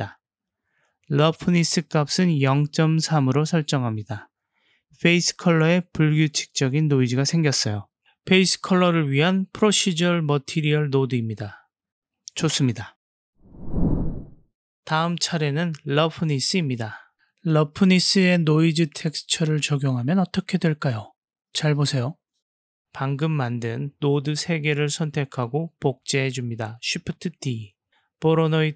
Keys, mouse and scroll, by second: 0.3 click, 1.2 middle click, 2.8-4.4 drag, 8.3 click, 11.0-11.9 drag, 15.3-15.6 drag, 16.1 g, 18.5 middle click, 22.8 click, 24.3-24.8 drag, 26.1 shift+d, 28.0 click.